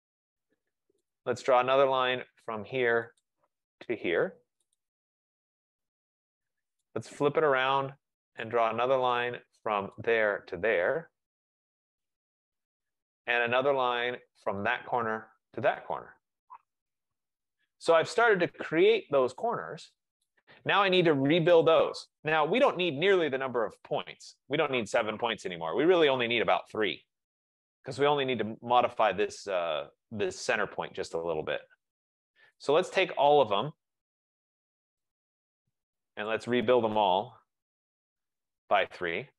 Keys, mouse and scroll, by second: 0.0 Return, 1.2 right click, 3.3 click, 4.9 click, 6.1 Return, 8.7 right click, 9.3 right click, 10.1 click, 11.7 click, 12.4 Return, 13.6 right click, 14.7 click, 16.1 click, 16.9 Return, 18.2 middle click, 18.6 middle click, 20.6 right click, 21.8 click, 22.6-23.0 typing, 23.7 Return, 26.4 click, 26.6-27.4 typing, 33.7 right click, 35.1 shift+click, 36.3 shift+right click, 37.1-37.9 typing.